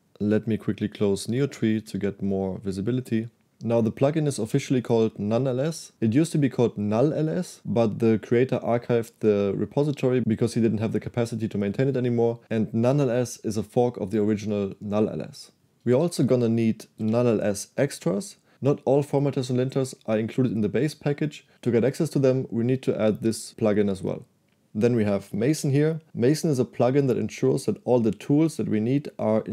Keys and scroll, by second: 1.4 \, 1.9 \, 4.1 j, 4.5 shift+v, 16.0 Escape, 16.3 j, 16.5 j, 17.1 shift+v, 25.2-26.1 typing.